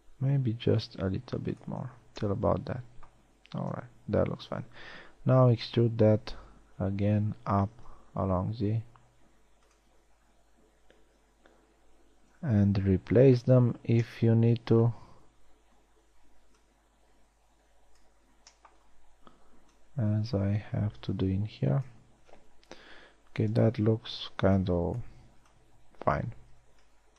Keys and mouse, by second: 2.4 z, 4.3 KP_1, 4.6 z, 6.0 e, 13.4 b, 17.2-18.6 drag, 18.8 b, 23.4 a, 25.0 b, 25.9 b.